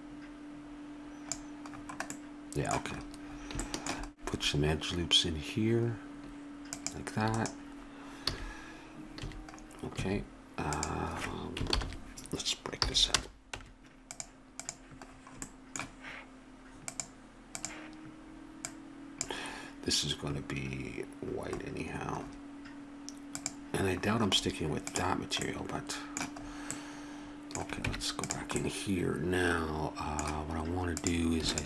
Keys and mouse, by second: 1.7-3.0 middle drag, 3.0 click, 8.3 a, 9.2 a, 9.9 a, 10.7-11.7 right drag, 11.7 ctrl+l, 12.8 p, 13.6 Tab, 14.6 right click, 15.5 click, 17.1 click, 20.4-21.5 drag, 21.5-23.3 middle drag, 23.3-25.4 drag, 25.4-26.8 middle drag, 26.8 click, 27.8 Tab, 28.7-30.4 middle drag, 31.0 click.